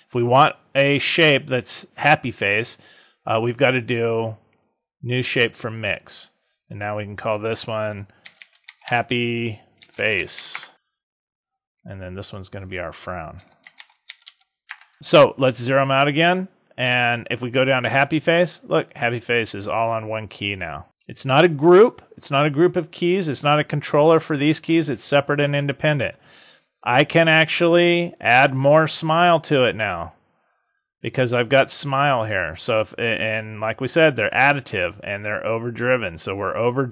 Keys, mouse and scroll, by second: 4.5 click, 7.1 click, 8.6 p, 11.7 click, 12.6 click, 16.1 click, 17.9 click, 28.9 click.